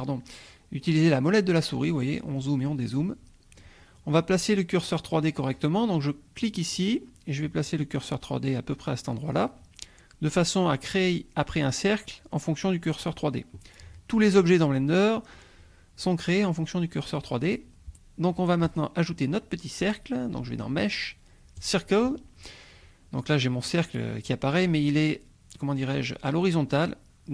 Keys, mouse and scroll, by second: 0.8-1.1 scroll up 2, 1.1-1.8 scroll down 2, 2.0 scroll up 1, 2.2-3.1 scroll down 3, 6.4 click, 9.4 click, 18.6 click, 21.6-22.5 drag.